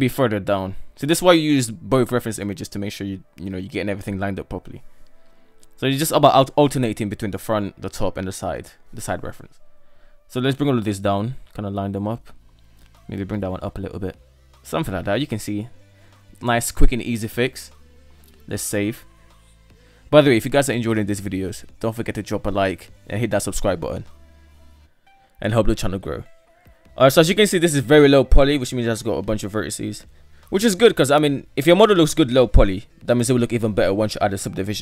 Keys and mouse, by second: 1.0 alt+z, 1.8 g, 5.9 alt+z, 6.2-7.1 drag, 7.3 alt+z, 8.1 g, 10.5 alt+z, 10.9 right click, 11.7 g, 13.0 alt+z, 13.3 middle click, 14.0 Tab, 14.8-16.6 middle drag, 17.0 ctrl+s, 19.0 middle click, 19.2-20.2 middle drag, 20.4 shift+middle drag, 20.9-22.0 middle drag, 22.4 KP_7, 23.4 shift+middle drag, 24.0 Tab, 25.8 shift+middle click, 26.5 g, 28.3 Tab, 28.9-31.9 middle drag.